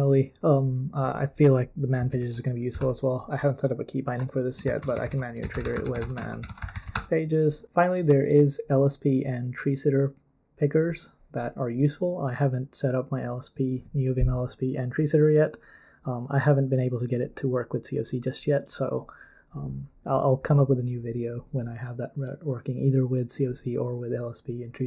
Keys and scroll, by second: 2.2 super+l, 2.5-3.3 typing, 4.2 Return, 4.4-7.4 typing.